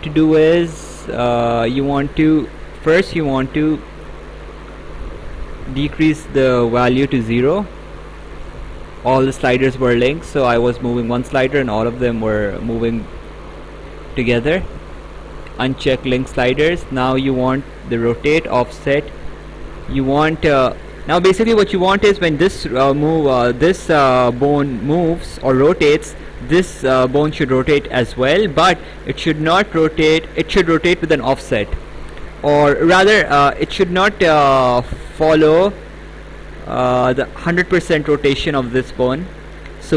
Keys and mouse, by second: 1.5 click, 15.6 click, 17.6 click.